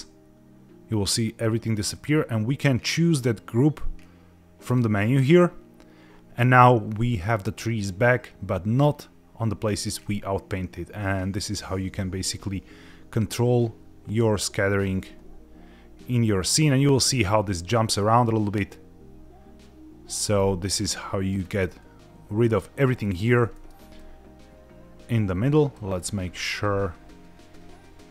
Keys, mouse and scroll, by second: 1.9-5.0 drag, 10.0 click, 20.3 middle click, 21.4-22.9 scroll down 2, 23.0 middle click, 23.5 middle click, 24.0 click, 26.0 click.